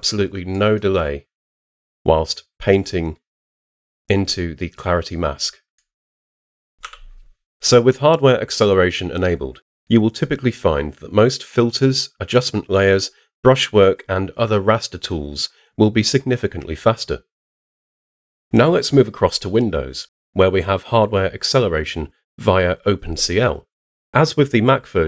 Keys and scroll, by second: 6.8 h.